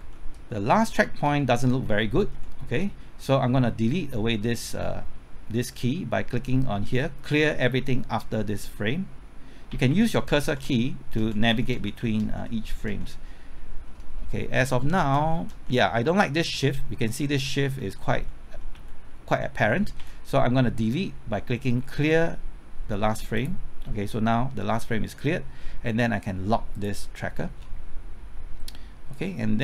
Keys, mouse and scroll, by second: 0.0-1.7 typing, 2.3 Left, 9.4-10.6 typing, 11.5 Left, 11.7 Right, 12.0 Left, 12.2 Right, 12.5 Left, 12.9 Right, 13.5-13.8 scroll up 1, 14.5 Left, 14.5-15.5 typing, 16.2 Left, 16.4 Right, 16.7 Left, 17.2 Right, 17.4 Left, 17.8 Right, 18.7 Left, 19.6 Right, 20.0 Left, 23.3-24.4 drag, 27.3 scroll down 1, 29.1-29.6 drag.